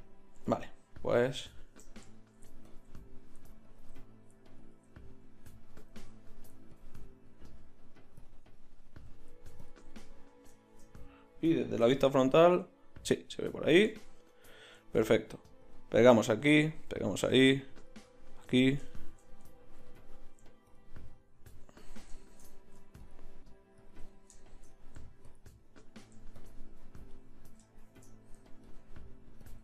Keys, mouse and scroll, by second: 2.7-11.4 middle drag, 11.8 KP_1, 12.8 middle click, 15.6 middle click, 18.1-20.2 drag, 20.7-29.6 drag.